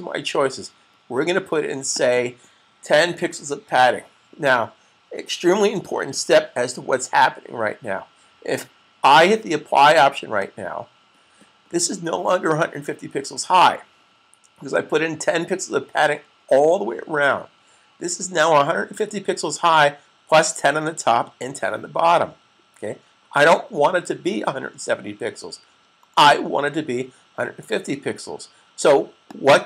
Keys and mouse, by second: 1.6 click, 3.0-3.8 typing, 10.2 click, 29.1 click.